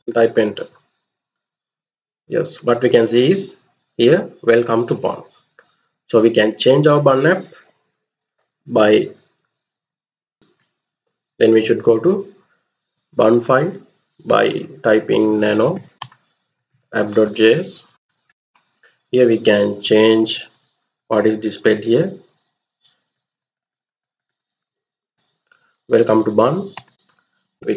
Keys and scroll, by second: 6.1 alt+Tab, 10.3 ctrl+c, 14.5-18.0 typing, 19.6 Down, 19.8 Down, 20.2 Down, 20.6 Right, 20.8 Right, 21.1 Right, 21.3-22.8 Right, 23.1 Right, 23.3 Right, 23.6 Right, 23.7 Right, 26.4-27.7 typing.